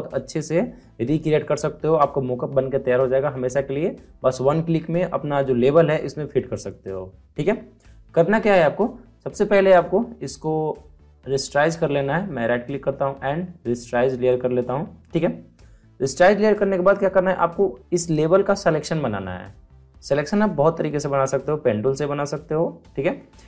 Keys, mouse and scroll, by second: 11.2 right click, 14.2 click.